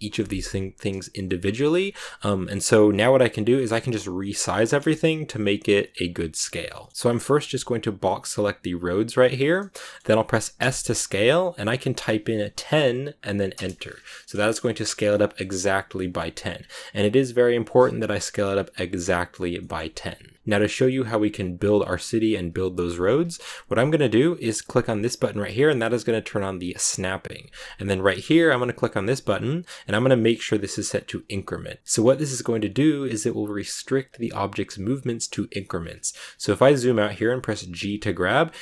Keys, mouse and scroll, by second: 1.6-3.9 scroll up 3, 3.9-4.6 scroll up 1, 4.6-6.9 shift+middle drag, 6.9 b, 7.3 b, 9.4 scroll down 3, 9.7 middle click, 10.5 s, 13.7 scroll down 5, 14.4-15.8 shift+middle drag, 15.8 shift+scroll up 1, 15.9 shift+middle click, 16.5-19.4 scroll down 1, 19.5-26.8 shift+middle drag, 26.8 click, 28.5-31.7 drag, 31.7-33.3 shift+middle drag, 35.8-36.2 scroll down 1, 36.2 scroll up 1, 36.2 scroll down 2, 37.7 g.